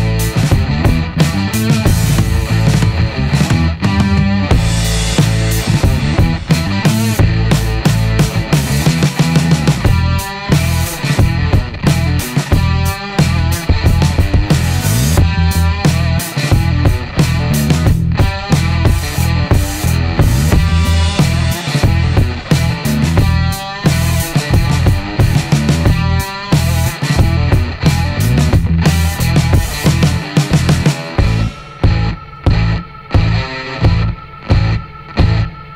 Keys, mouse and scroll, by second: 2.1 click, 2.9 click, 3.4 middle click, 5.2 click, 5.9 click, 6.5 middle click, 10.4 click, 11.2 click, 14.0 click, 14.6 click, 15.2 middle click, 17.3 click, 18.0 click, 19.6 click, 20.4 click, 20.9 middle click, 23.2 click, 23.7 click, 26.2 click, 26.7 click, 27.4 scroll down 1, 27.6 middle click, 28.0 right click, 28.4 scroll down 1, 28.6 middle click, 30.1 click, 30.5-32.0 middle drag, 33.2 click, 34.7 click.